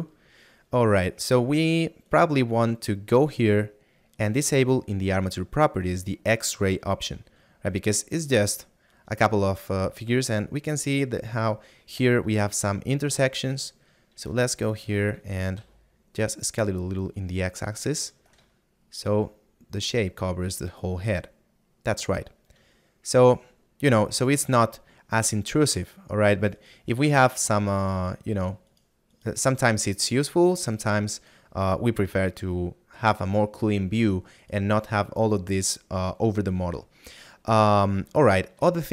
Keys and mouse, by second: 2.0 right click, 5.2 click, 7.8 shift+middle click, 12.6 shift+middle click, 18.8 middle click, 27.9 right click, 30.0 right click, 37.0 middle click.